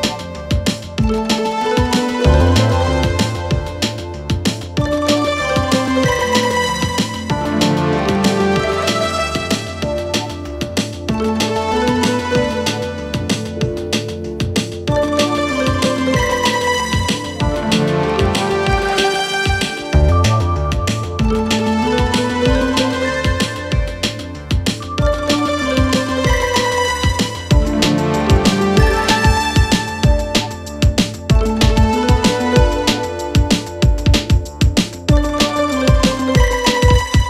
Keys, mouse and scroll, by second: 6.8-8.5 right drag, 8.5 click, 10.1 click, 10.6 click, 10.8 scroll up 1, 11.6 click, 14.3 click, 14.8 click, 15.0 click, 15.2 click, 15.5 2, 15.6 click, 16.2 alt+click, 16.5-16.9 scroll down 2, 16.9 click, 17.6 click, 17.8 click, 18.2-19.4 scroll up 3, 19.4 click, 19.7 scroll down 3, 20.2 Tab, 20.7 click, 21.0 Tab, 21.7 click, 22.3 click, 22.6 Tab, 22.8 right click, 23.5 Tab, 24.7 click, 25.8 shift+right click, 26.2 shift+a, 27.6 scroll down 2, 27.9 s, 28.7-29.5 scroll up 7, 29.5 click, 30.2 g, 31.9 g, 37.0 click.